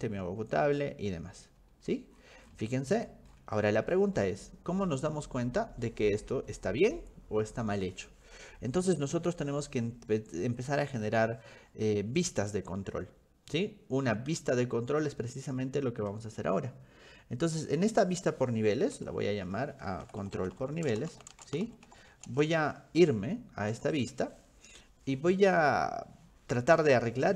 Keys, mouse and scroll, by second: 1.5-4.4 scroll down 14, 9.3-11.9 scroll up 19, 17.6 click, 19.9-22.6 typing, 23.7 click, 24.0 click.